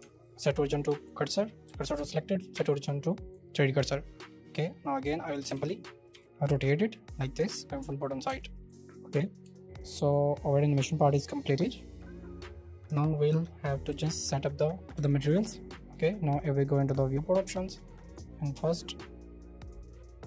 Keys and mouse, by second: 0.0 Tab, 1.6 w, 1.9 Tab, 2.5 y, 3.3-4.8 middle drag, 5.4 space, 6.1 r, 6.4 x, 8.2 Escape, 8.6 middle click, 9.4 shift+middle click, 12.8 KP_0, 13.8-14.2 shift+middle drag, 14.3 middle click, 15.3 click, 17.4 shift+middle click, 19.6 click.